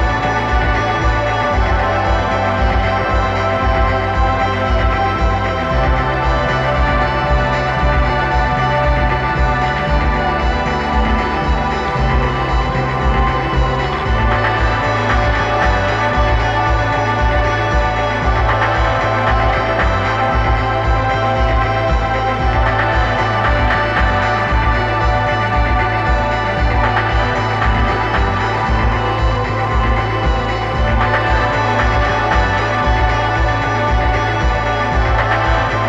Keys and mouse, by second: 11.5 click, 12.7 click, 13.4 click, 14.3 click, 16.2 click, 18.6 click, 20.2 click, 21.3 click, 22.0-23.5 drag, 26.7 click, 30.2 click, 31.7-35.0 drag.